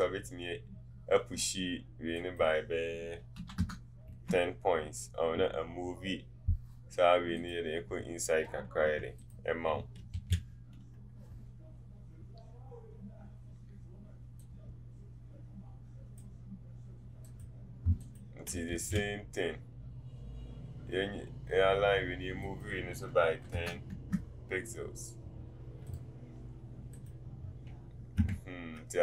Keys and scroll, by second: 3.4 typing, 8.8 t, 18.7 ctrl+a, 23.3 KP_1.